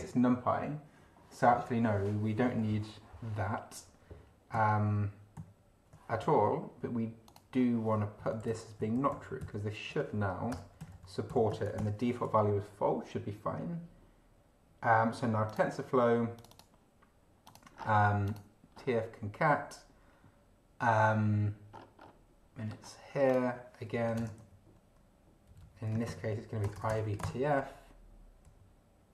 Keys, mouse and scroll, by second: 4.5 ctrl+z, 5.4 ctrl+z, 7.2 click, 8.2 Right, 8.4 Left, 10.5 BackSpace, 10.8 Left, 11.7 ctrl+alt+b, 15.4 click, 16.3 click, 17.4 click, 17.9 scroll down 1, 18.2 click, 18.7-19.0 scroll up 2, 21.7 scroll up 2, 22.7 scroll up 2, 23.3 click, 23.9 Up, 24.2 Return, 24.4 ctrl+v, 25.5 Up, 25.8 Home, 26.1 ctrl+Right, 26.6 ctrl+BackSpace, 27.0 ctrl+t, 27.1 ctrl+f, 27.2 ctrl+space, 27.6 ctrl+End, 28.4 Down.